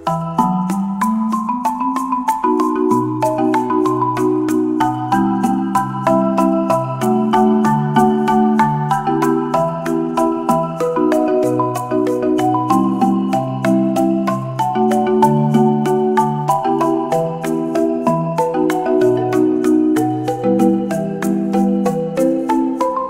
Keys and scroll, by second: 2.5 space, 6.4 space, 10.8 space, 15.5 space, 18.0 space, 20.9 space.